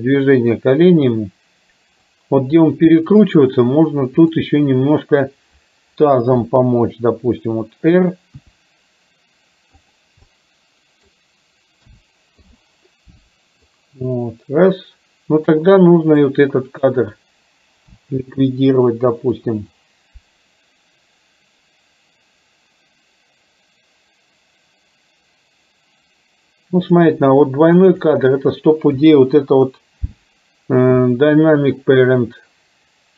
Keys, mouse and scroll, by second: 3.0 middle click, 4.2 click, 6.5 KP_7, 8.5 r, 10.4 middle click, 11.9 a, 12.5 i, 13.7-15.7 drag, 16.2-17.0 drag, 18.1 Delete, 19.9-27.2 drag, 27.5-28.1 drag, 29.1 Delete.